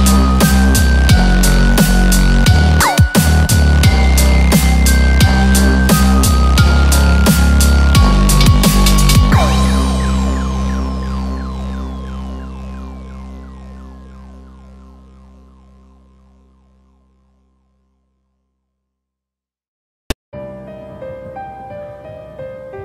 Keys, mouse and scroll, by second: 0.0 shift+middle click, 0.0 click, 0.0 scroll up 5, 0.9 g, 2.8 click, 2.8 g, 2.9 g, 3.9 4, 13.2 click, 13.2 scroll up 2, 13.2 3, 13.4 click, 13.7 scroll down 1, 14.0 middle click, 14.8 shift+middle click, 15.1 middle click, 16.7 e.